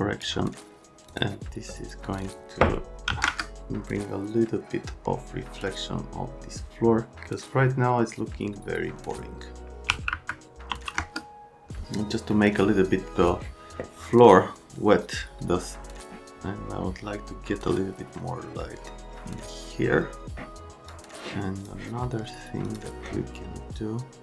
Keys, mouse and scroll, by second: 1.1 click, 2.1 click, 2.2 click, 3.1 KP_2, 3.2 KP_Enter, 9.9 KP_1, 10.1 KP_Decimal, 10.7 KP_5, 10.9 KP_Enter, 20.9 click, 22.6 click.